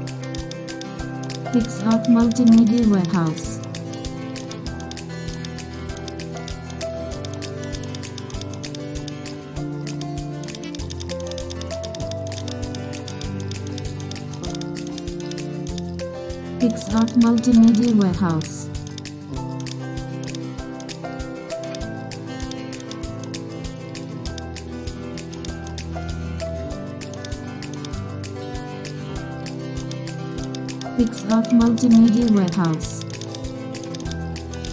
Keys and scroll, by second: 5.9 super+space, 33.5 super+z.